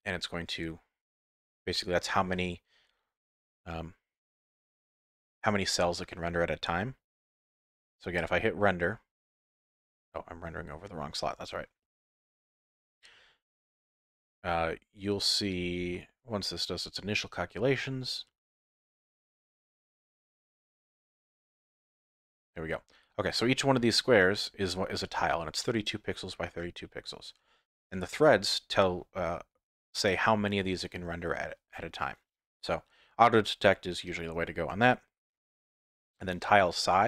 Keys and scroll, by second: 10.4 F12.